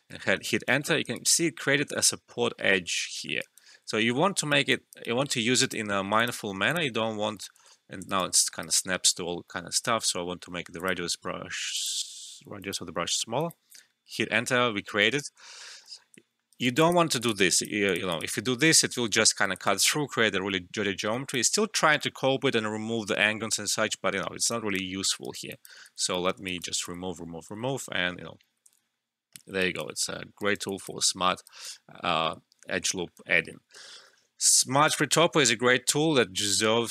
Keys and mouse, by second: 0.4 alt+right click, 0.4-0.7 typing, 1.1 alt+right click, 3.1 alt+middle click, 3.3 alt+right click, 3.5-4.0 typing, 4.0 alt+middle click, 4.3 alt+right click, 4.6 alt+click, 5.0 alt+right click, 5.6 click, 8.0 alt+right click, 8.3 alt+middle click, 8.6 alt+right click, 9.6 [, 10.7 click, 13.8 Return, 16.1 Return, 16.3 alt+middle click, 16.5 alt+right click, 16.8 alt+click, 17.2 typing, 18.3 Return, 19.6 alt+right click, 20.8 typing, 20.9-24.5 alt+drag, 25.2 alt+right click, 25.5 alt+click, 25.8 ctrl+alt+z, 26.4 alt+right click, 26.8 ctrl+z, 29.5 typing, 29.6 alt+right click, 30.1 alt+middle click, 30.4 alt+right click, 30.6 alt+click, 30.6 typing, 31.4 alt+right click, 32.8 alt+middle click, 33.7 alt+middle click.